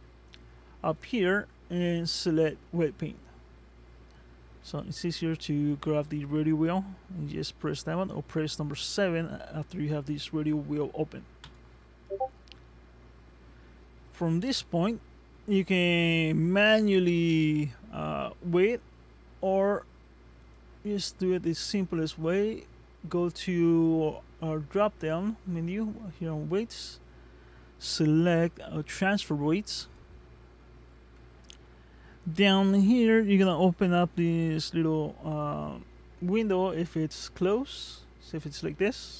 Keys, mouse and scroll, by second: 0.9 click, 5.2 ctrl+Tab, 20.4 click, 37.6 click.